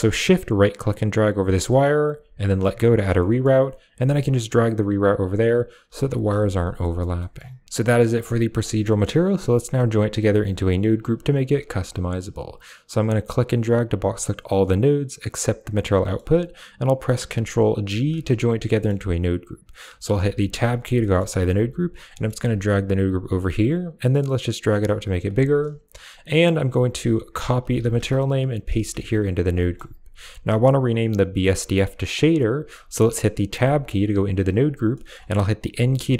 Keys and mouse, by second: 1.0 shift+click, 3.1 middle click, 3.8 g, 5.1 drag, 5.7 g, 6.3 a, 6.7 middle click, 7.1 middle click, 7.9 middle click, 8.6 middle click, 10.8 click, 12.1 click, 13.0-14.9 drag, 15.9 middle click, 17.7 ctrl+g, 18.6 middle click, 20.1 Tab, 20.9 middle click, 21.4 g, 21.8 click, 22.0 middle click, 22.3 g, 22.8 click, 24.0 click, 24.8 click, 26.2 click, 27.1-27.9 drag, 28.4-28.9 drag, 29.5 middle click, 30.1 click, 32.2 click, 33.4 Tab, 34.8 middle click, 35.6 n.